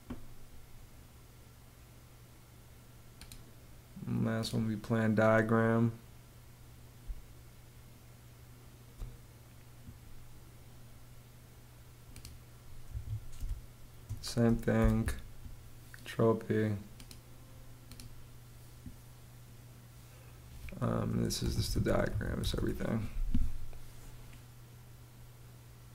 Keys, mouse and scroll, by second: 6.5 space, 12.3 Escape, 12.9 space, 14.2 super+p, 20.7-22.3 typing.